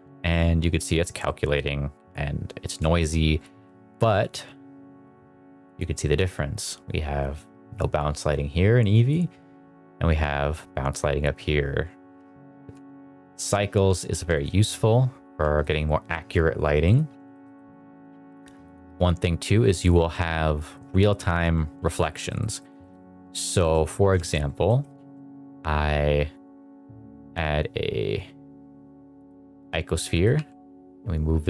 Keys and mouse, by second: 1.1-1.5 middle drag, 2.9 shift+middle drag, 4.1 click, 5.7 click, 12.1 r, 12.5 click, 12.8 g, 13.1 click, 13.6 r, 14.0 g, 14.2 click, 15.2 g, 16.7 middle drag, 17.2 shift+middle drag, 17.4 middle drag, 17.8 shift+middle click, 18.5 click, 18.8 KP_Decimal, 19.7-20.1 middle drag, 20.5 middle drag, 21.8 shift+middle drag, 22.2 middle drag, 22.5 shift+middle click, 22.7 shift+middle drag, 23.3 middle click, 23.5 shift+middle drag, 24.1 shift+middle drag, 24.6 middle click, 24.8 shift+a, 29.9 middle drag, 30.2 g.